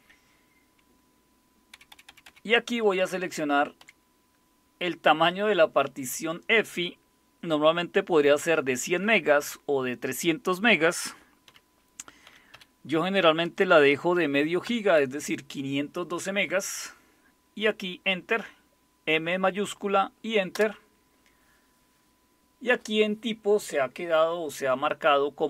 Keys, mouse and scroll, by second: 1.7 Left, 1.9 Left, 2.1 Left, 2.3 Left, 3.0 Delete, 3.2 Delete, 3.4 Delete, 3.8 Delete, 11.5-12.5 typing, 14.7 typing, 20.5 Return.